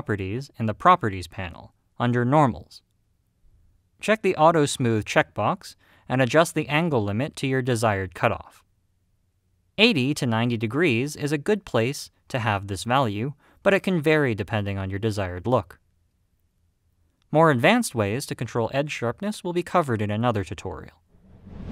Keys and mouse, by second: 6.7-12.7 drag, 13.4-21.7 middle drag.